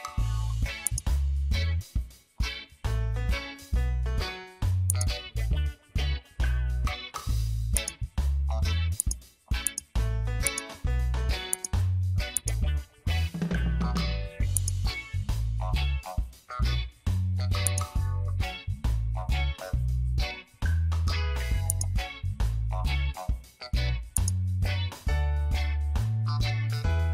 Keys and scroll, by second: 3.5 ctrl+t, 6.3 Return, 16.2 ctrl+t, 20.6 Return, 22.9 ctrl+t.